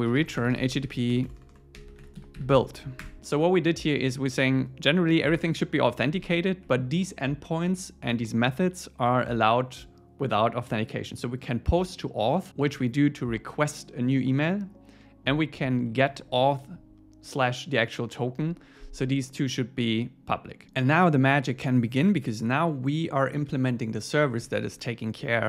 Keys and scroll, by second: 3.0 Return, 6.6 Up, 16.0 Down, 24.5 super+1.